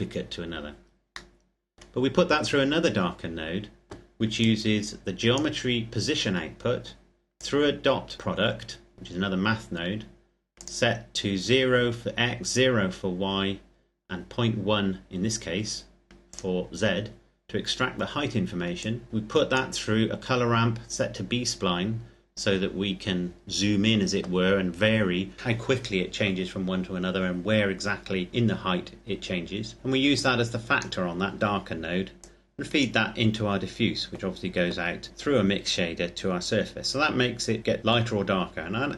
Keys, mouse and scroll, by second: 1.1 middle click, 4.1 click, 7.4 click, 10.3 click, 16.0 click, 18.5 click, 21.5-22.5 scroll up 1, 22.5-24.3 scroll down 1, 29.9 click, 36.8-37.7 scroll down 1.